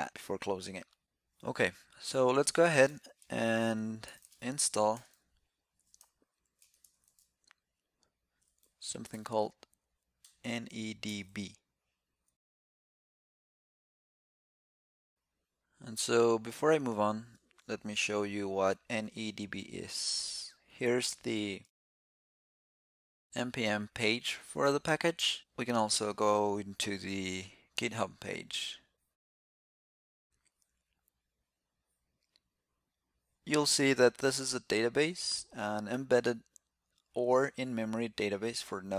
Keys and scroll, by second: 19.6 ctrl+alt+super+Left, 21.5 alt+super+f.